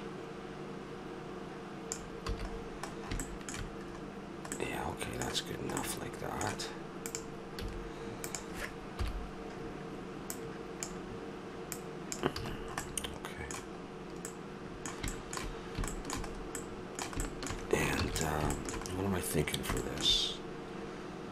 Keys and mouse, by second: 2.3 a, 2.5-7.1 middle drag, 7.1 right click, 7.6-9.0 drag, 7.6 a, 9.0 KP_7, 12.2 click, 12.4 a, 12.6 click, 13.1 click, 13.6 middle click, 17.4-19.8 middle drag, 18.0 ctrl+s.